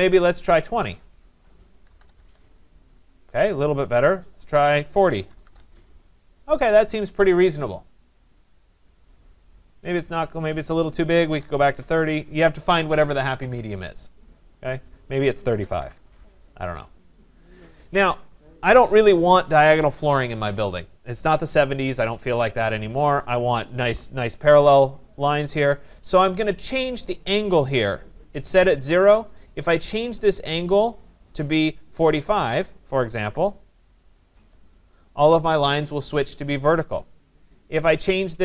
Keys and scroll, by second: 2.2 Tab, 11.6 Tab, 34.3 Tab.